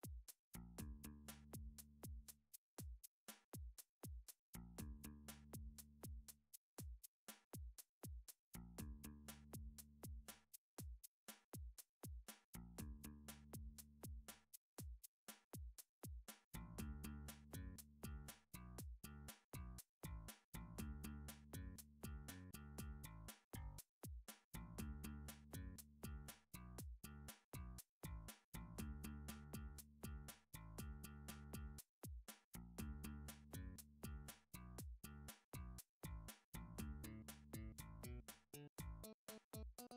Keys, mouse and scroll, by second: 1.5 click, 3.3 middle click, 3.8 e, 4.9 click, 6.2 s, 8.0 click, 8.9 middle click, 9.2 middle click, 9.3 middle click, 10.1 middle click, 10.8 middle click, 11.3 e, 12.9 click, 15.0 s, 16.2 click, 18.0 middle click, 18.8 middle click, 19.9 e, 21.1 click, 21.9 s, 24.1 click, 25.0 3, 26.0 e, 27.0 right click, 27.7 ctrl+z, 28.4 r, 29.4 click, 30.8 s, 31.4 click, 33.8 middle click, 33.8 s, 34.2 y, 35.4 s, 35.6 right click, 36.2 middle click, 37.0 alt+click, 37.5 alt+click, 38.0 s, 38.7 x, 38.9 click, 39.5 alt+click.